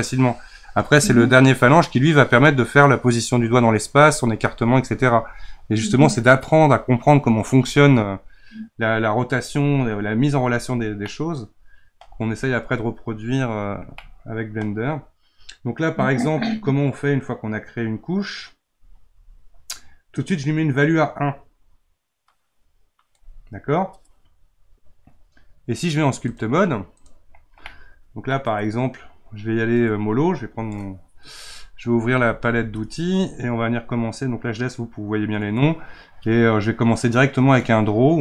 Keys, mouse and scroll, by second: 11.0-20.1 middle drag, 20.1-27.6 drag, 27.6 middle click, 28.5 scroll up 2, 32.4 t, 37.6-38.2 drag.